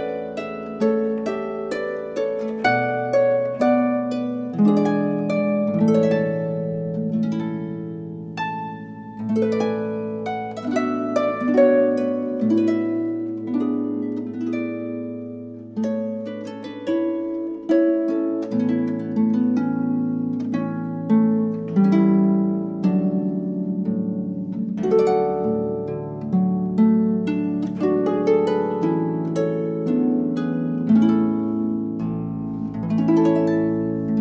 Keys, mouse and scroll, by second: 0.8 alt+r, 1.5 alt+g, 5.3 KP_3, 6.2 middle drag, 7.4 r, 9.5 i, 13.9-15.9 drag, 16.6 r, 18.9 i, 21.2-23.1 drag, 23.5-25.2 drag, 25.8-26.5 middle drag, 26.5 click, 27.1 middle click, 27.2 click, 28.6 click, 31.9 t, 32.4 click, 33.1 KP_1.